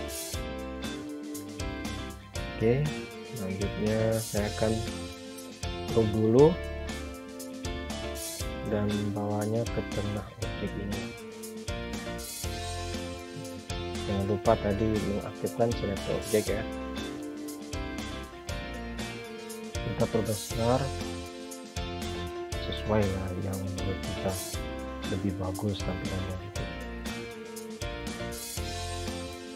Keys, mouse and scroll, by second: 1.1 click, 4.9 click, 10.0 click, 14.8-16.1 scroll up 1, 16.7-17.7 scroll down 1, 17.7 click, 28.0 right click.